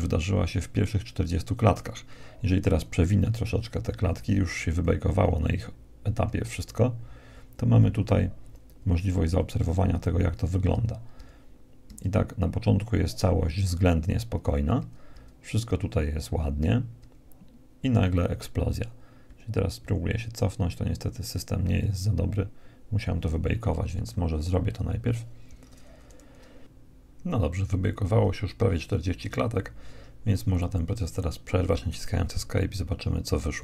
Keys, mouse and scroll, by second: 0.6 Escape, 2.7 Right, 3.1 Right, 3.5 Right, 3.7 Right, 3.9 Right, 4.1-4.9 Right, 5.3 Right, 5.7 Right, 6.6 Right, 7.1 Right, 7.7 Right, 8.1 Right, 8.4 Right, 8.9 Right, 9.4 Right, 9.9 Right, 10.4 Right, 10.9 Right, 11.5 Right, 12.1 Right, 12.7 Right, 14.4 Right, 15.0 Right, 15.6 Right, 16.1 Right, 16.9 Right, 17.9 Right, 18.8 Right, 18.8 Left, 19.3 Left, 19.8 Left, 20.4 Left, 21.5 Left, 22.8 Right, 23.9 Escape, 26.7-32.2 drag, 32.2 Escape.